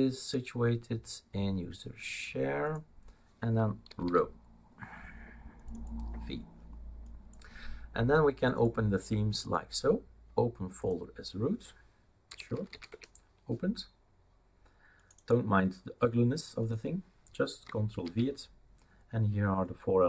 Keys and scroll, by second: 3.8-4.5 typing, 12.0-13.2 typing, 18.0 ctrl+v.